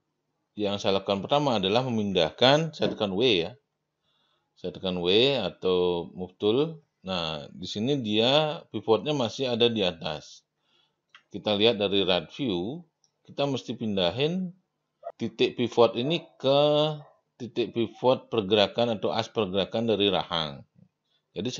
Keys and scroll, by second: 3.2 w, 11.3 space.